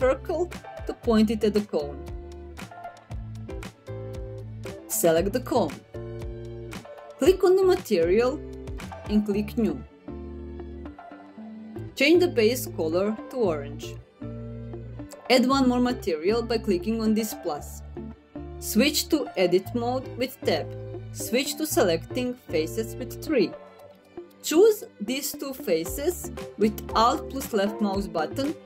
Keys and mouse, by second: 2.5 middle click, 6.9 click, 7.6 click, 10.9 click, 17.4 click, 20.0 Tab, 22.6 3, 23.4 middle click.